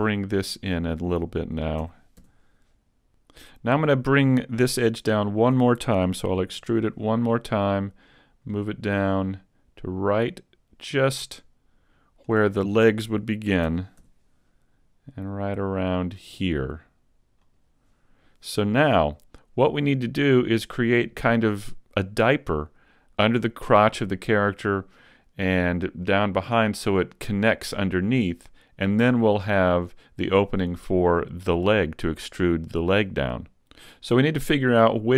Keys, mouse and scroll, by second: 0.3 alt+right click, 1.8 s, 5.1 alt+right click, 6.6 e, 7.1 click, 8.5 click, 13.7 s, 16.9 s, 17.5 click, 17.7 click.